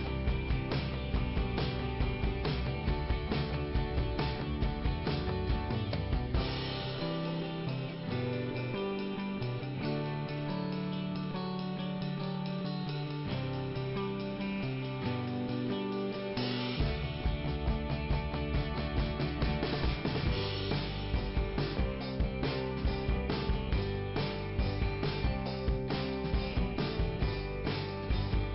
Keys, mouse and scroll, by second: 2.5 middle click, 3.6 scroll up 2, 5.6 scroll down 1, 6.5 right click, 7.5 click, 8.6 click, 14.7 click, 15.6 middle click, 17.4-17.8 scroll down 2, 17.8 click, 19.7 scroll down 2, 22.1 scroll up 2, 23.1 right click, 23.7 click, 25.4 click, 26.6 click, 27.1 click.